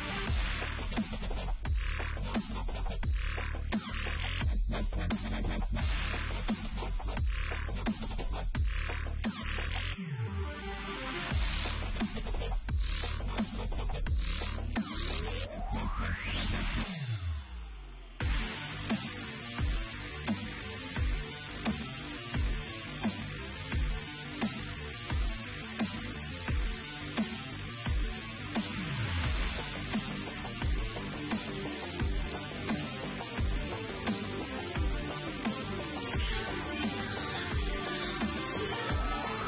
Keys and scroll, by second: 1.6 ctrl+z, 1.7-2.7 typing, 3.6 ctrl+t, 4.3 Return, 5.8 ctrl+t, 6.6 Return, 9.4-10.7 typing, 14.0 ctrl+t, 15.7 Down, 15.9 Delete, 16.0 ctrl+z, 17.3 ctrl+t, 18.9 Return, 20.2 ctrl+t, 21.0 Return, 22.8 Left, 26.6 ctrl+z, 27.1 ctrl+z, 27.7 ctrl+m, 35.3 Delete, 38.1 ctrl+t.